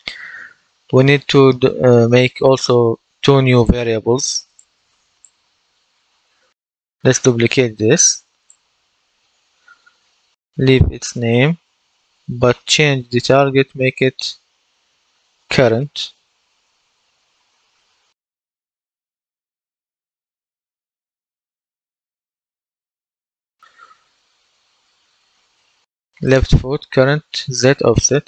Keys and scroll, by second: 10.3 Right, 11.0 BackSpace, 11.6 BackSpace, 12.7 Left, 13.2 Left, 16.3 BackSpace, 18.2 BackSpace, 19.5-21.7 typing, 22.3 Return.